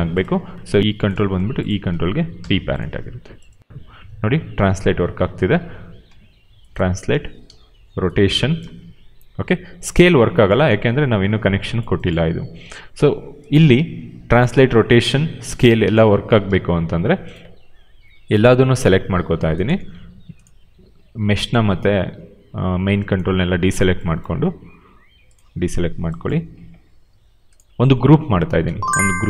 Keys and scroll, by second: 2.8 p, 3.6 e, 4.6 ctrl+z, 6.0 w, 7.0 ctrl+z, 7.4 e, 8.5 ctrl+z, 12.5 q, 13.8 w, 14.6 ctrl+z, 14.9 e, 15.4 ctrl+z, 15.7 r, 16.4 ctrl+z.